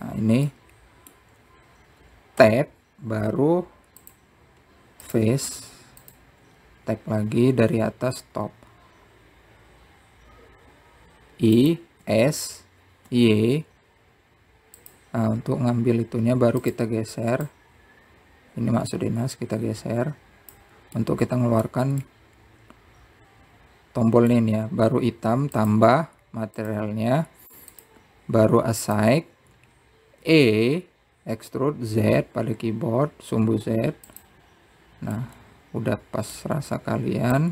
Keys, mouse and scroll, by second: 2.3-4.2 middle drag, 4.2 Tab, 5.8 click, 6.9 click, 9.4 i, 13.8 s, 18.4-19.4 drag, 22.7-26.8 middle drag, 27.3-28.4 drag, 29.6-32.0 drag, 32.0 e, 37.0-37.5 middle drag.